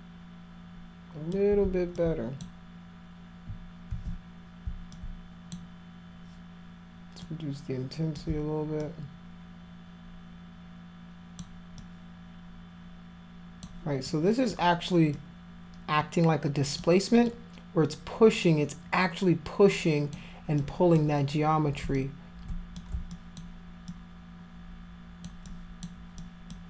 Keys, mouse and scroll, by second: 2.0 alt+click, 3.9 ctrl+z, 4.9 alt+click, 7.2 click, 8.8-11.4 alt+drag, 11.8-13.7 alt+drag, 14.1 alt+click, 15.2-16.8 alt+drag, 17.3-20.1 alt+drag, 20.6 alt+click, 22.0 click, 23.1 alt+click, 23.9-25.2 alt+drag, 25.5 alt+click, 26.2 alt+click.